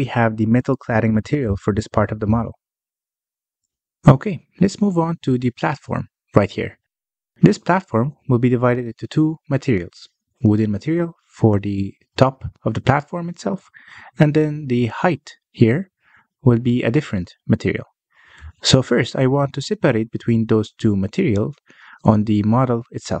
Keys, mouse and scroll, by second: 1.4-2.9 drag, 2.9 middle click, 3.2 alt+a, 3.7-4.2 scroll up 1, 4.2-7.4 middle drag, 7.4 click, 8.4 scroll up 2, 8.8-12.4 middle drag, 12.4 scroll down 1, 12.7 middle click, 13.0 Tab, 13.4 3, 13.7 drag, 14.7 middle click, 15.1-15.4 scroll up 2, 15.4-16.5 shift+middle drag, 16.5 click, 17.2 shift+click, 17.9 shift+click, 19.7 Tab, 20.2 scroll down 1, 20.5 middle click, 20.8 alt+a, 21.4 scroll down 1, 21.4-23.2 middle drag.